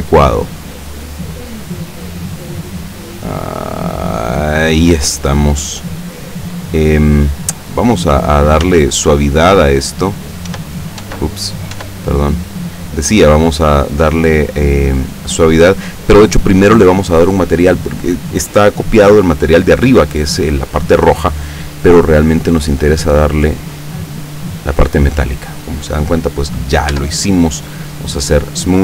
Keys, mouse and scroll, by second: 1.6-2.6 middle drag, 3.0-5.0 drag, 5.2 scroll down 1, 5.4-6.7 middle drag, 7.0 scroll up 1, 7.8 scroll down 1, 8.7 Tab, 10.2 right click, 10.6 Tab, 11.6 right click, 11.9 Tab, 17.9 click, 22.5 click, 24.3 click, 27.0 Tab, 28.4 click.